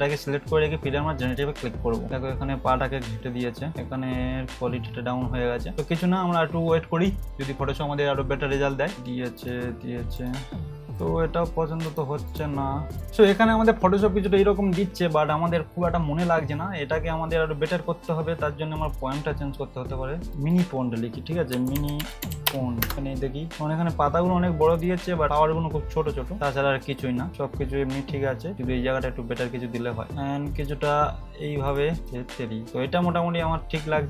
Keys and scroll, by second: 21.5-22.8 typing.